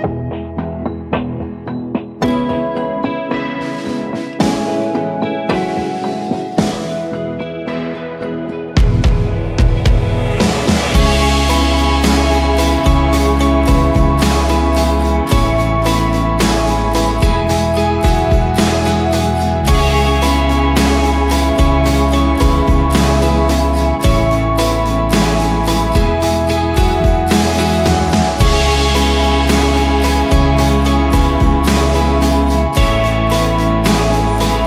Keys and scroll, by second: 0.0-0.2 typing, 1.3-2.0 typing, 2.1 Return, 2.8 Return, 5.9 8, 6.2 Return, 7.9 Return, 8.2 v, 8.7 ctrl+=, 8.8 ctrl+=, 9.0-9.8 space, 11.2 space, 13.8 ctrl+d, 15.9-18.0 typing, 19.0 Return, 24.6-25.8 typing, 26.9-27.9 typing, 29.3 BackSpace, 30.3-31.0 typing.